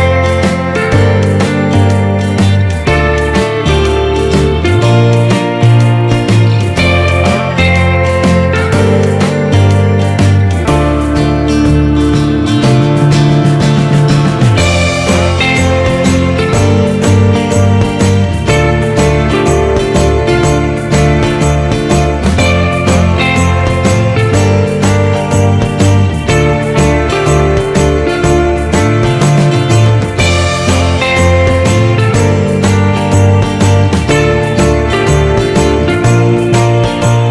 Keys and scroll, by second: 5.8 ctrl+z, 17.6 ctrl+-, 32.1 ctrl+-, 32.5 ctrl+0.